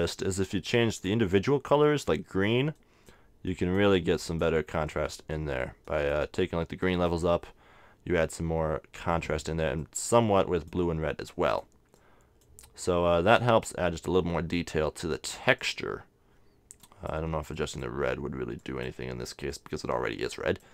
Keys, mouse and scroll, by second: 0.9-2.6 drag, 1.4 middle click, 2.6 middle click, 3.0-8.7 drag, 9.1-15.2 drag, 15.6-20.7 drag.